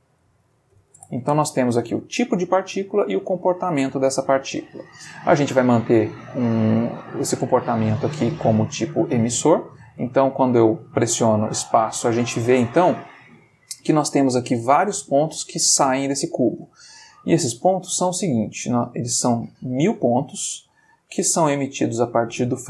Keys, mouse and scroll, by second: 0.0-0.8 typing, 1.0 Return, 9.6 click, 10.0 space, 11.1-12.2 middle drag, 16.1 space.